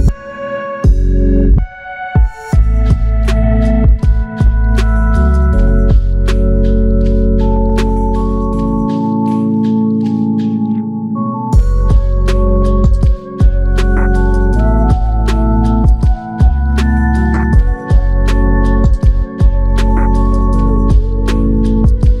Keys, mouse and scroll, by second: 1.4 alt+click, 2.8 alt+click, 5.2 alt+click, 13.9 ctrl+click, 16.6 ctrl+click, 19.3 alt+click.